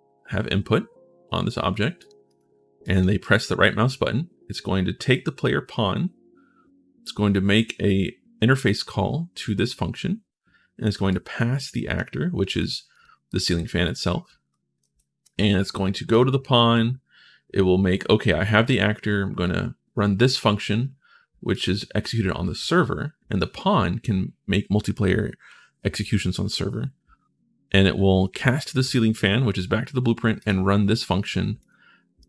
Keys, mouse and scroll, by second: 1.7 click, 2.1 click, 2.6 click, 3.0 right click, 10.9 click, 12.7 click, 14.6 ctrl+shift+s, 15.9 click, 21.3 click, 30.1 click, 31.4 click, 32.0 right click.